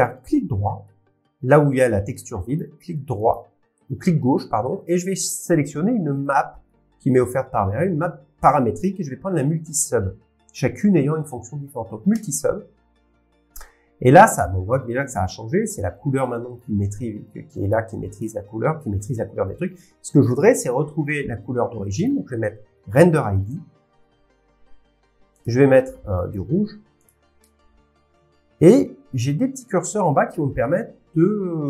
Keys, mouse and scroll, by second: 0.2 click, 2.5 right click, 7.4 middle click, 7.4 scroll, 7.4 scroll down 9, 9.5 scroll, 12.2 click, 12.2 scroll down 10, 16.2 click, 17.7 click, 18.8 click, 22.0 click, 23.5 click, 25.4 click, 29.3-30.6 drag, 31.0 click.